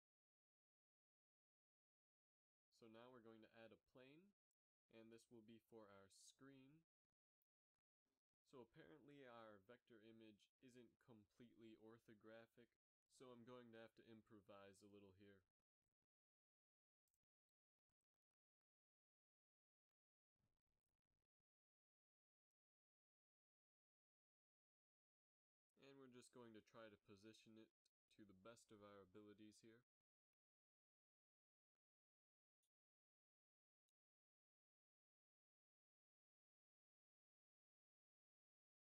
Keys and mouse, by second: 2.9 KP_1, 3.8 shift+a, 6.6 r, 8.9 g, 10.6 Tab, 12.4 s, 15.5 a, 15.8 b, 16.7 g, 17.8 g, 20.1 a, 20.4 a, 20.9 s, 30.1 KP_1, 31.5 KP_7, 32.8 r, 35.5 s.